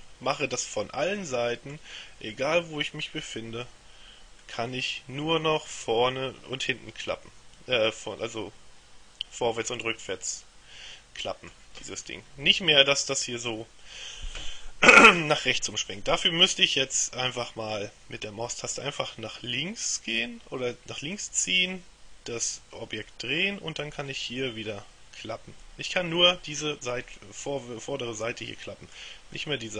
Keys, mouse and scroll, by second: 2.4-4.2 middle drag, 4.5-12.1 middle drag, 16.0-18.3 middle drag, 18.8-24.0 middle drag, 24.2-29.5 middle drag.